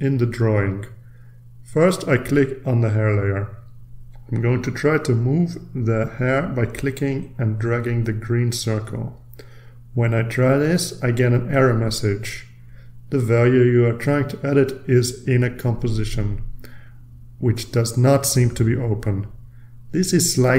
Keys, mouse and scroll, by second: 3.4 click, 5.6-9.7 drag, 11.6-14.3 drag, 19.2 click.